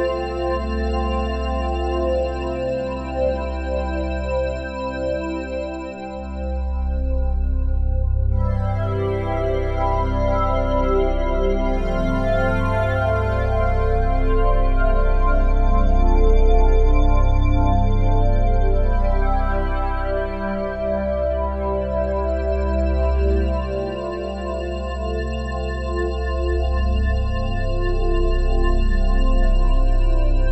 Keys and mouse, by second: 0.5 click, 2.2 click, 4.8 ctrl+alt+click, 6.2 click, 7.2 click, 8.2 click, 9.9 click, 10.2 click, 10.9 click, 11.7 alt+click, 12.9-16.0 alt+shift+drag, 16.2-18.1 alt+drag, 18.5 alt+click, 19.6 1, 20.0 ctrl+alt+click, 20.5 alt+shift+click, 21.6 alt+click, 22.3 ctrl+alt+click, 23.2 1, 23.6 ctrl+alt+click, 26.7 click, 27.2 click, 28.5 a.